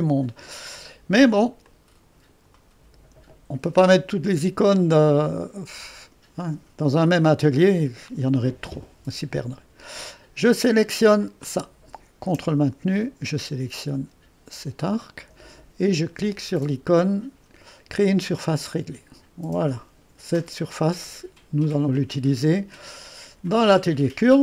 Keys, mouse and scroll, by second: 0.0 click, 1.7-2.8 drag, 2.8-6.0 middle drag, 8.8-9.5 scroll up 2, 9.5-14.6 drag, 14.9-18.3 drag, 18.4 click, 21.7-24.4 drag.